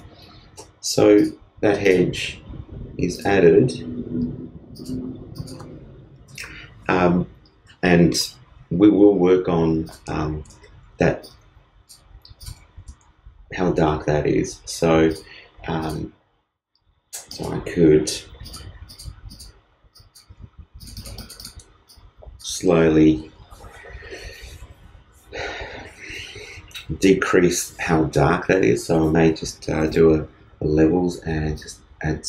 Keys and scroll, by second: 29.8 super+l.